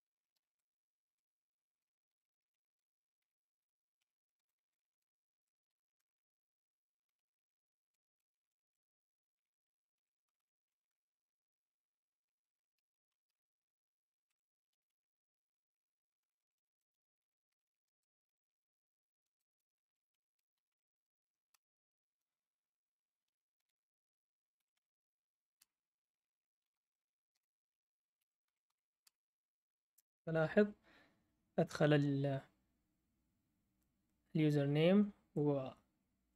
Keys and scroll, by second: 0.0-11.3 typing, 12.5-13.3 typing, 14.3 Escape, 14.4-29.0 typing.